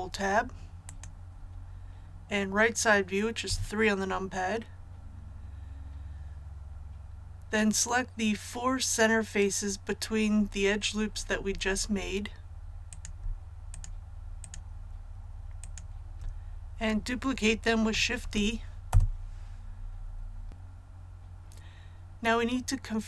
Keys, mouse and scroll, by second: 0.8 click, 3.4 KP_3, 12.8 right click, 13.6 shift+right click, 14.3 shift+right click, 15.5 shift+right click, 18.1 shift+d, 18.8 Return.